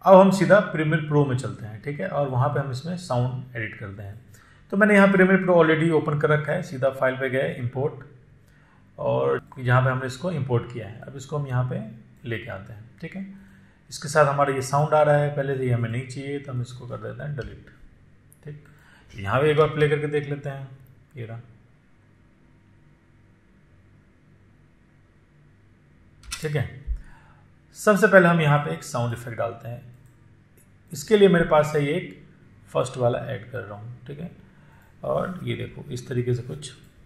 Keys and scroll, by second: 18.2 Delete, 20.5 space, 27.1 space.